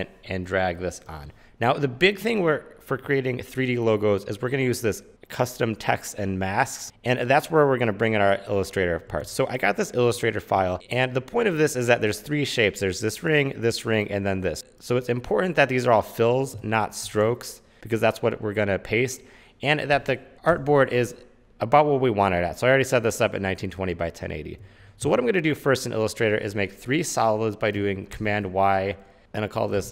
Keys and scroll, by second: 0.0-0.5 typing, 9.4 super+Tab, 20.6 super+n, 24.1 Escape, 25.2 super+Tab, 28.3 super+y, 29.6-29.9 typing.